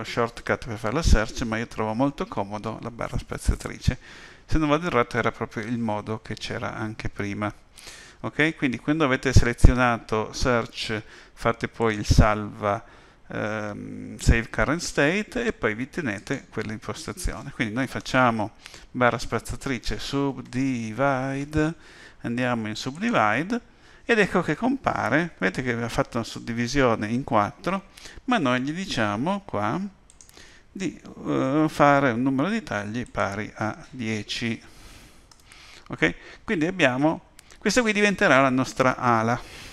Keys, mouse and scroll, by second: 18.0 space, 30.1 click, 30.2 click, 33.0 click.